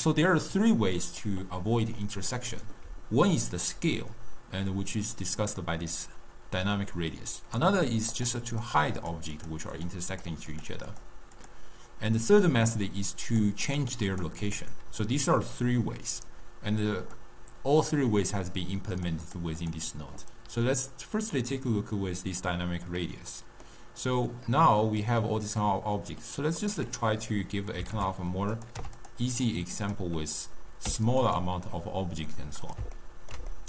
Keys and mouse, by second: 0.6-3.0 middle drag, 3.0-3.7 d, 5.2 d, 8.2 click, 8.7 click, 9.1 click, 9.4 click, 9.8 click, 10.2 click, 10.6 click, 11.0 click, 11.4 click, 12.4 middle click, 13.3 click, 13.7 click, 14.2 click, 14.5 click, 17.2-19.2 drag, 19.3 click, 19.7 click, 23.0-26.7 middle drag, 26.7-28.2 drag, 28.6 click, 29.9-31.5 drag, 32.4-33.6 middle drag.